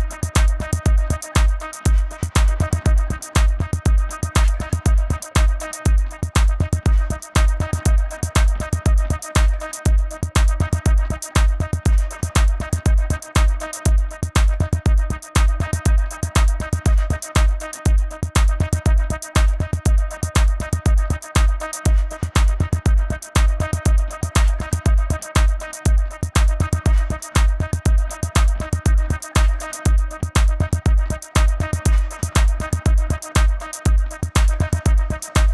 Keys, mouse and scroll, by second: 9.8 v, 11.3 click, 15.1 click, 16.5 Return, 17.9 click, 23.8 click, 26.5 click, 32.7 Return, 34.1 click.